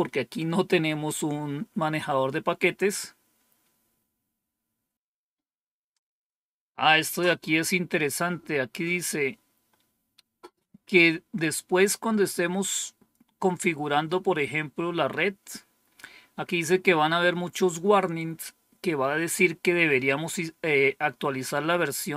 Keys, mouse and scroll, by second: 11.2-13.0 drag.